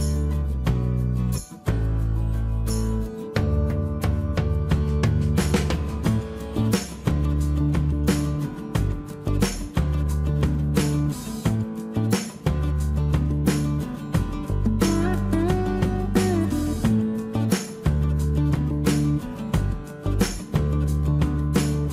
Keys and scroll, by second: 2.4-3.2 typing, 6.5-7.7 typing, 17.4 space.